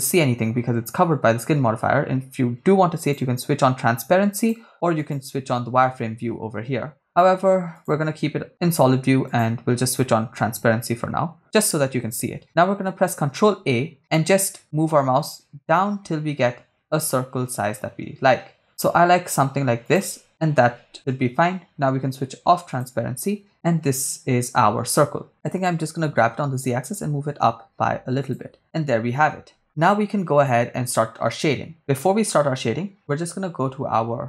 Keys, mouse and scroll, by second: 3.0 click, 4.4 click, 5.1 click, 7.1 click, 7.8 click, 9.3 click, 13.3 ctrl+a, 19.9 click, 20.7 Tab, 22.7 click, 25.4 g, 26.0 z, 28.3 shift+click.